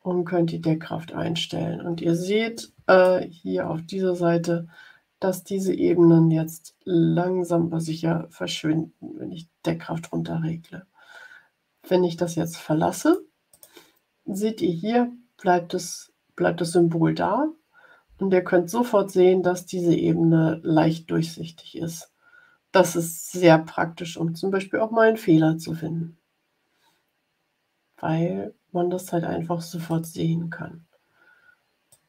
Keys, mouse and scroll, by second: 5.6-13.2 drag, 13.4 click, 29.8 click, 31.8-32.0 drag.